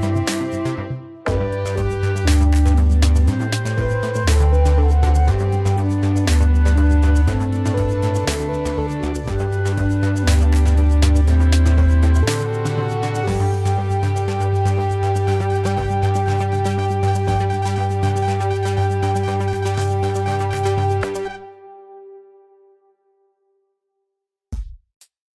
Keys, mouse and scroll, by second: 24.8 alt+click.